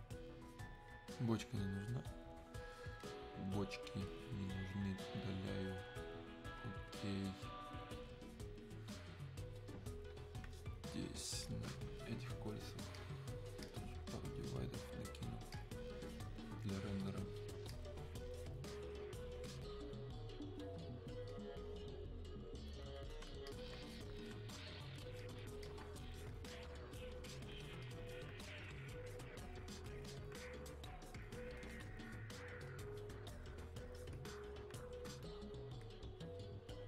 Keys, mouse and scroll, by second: 3.1 click, 11.5 click, 21.4 click.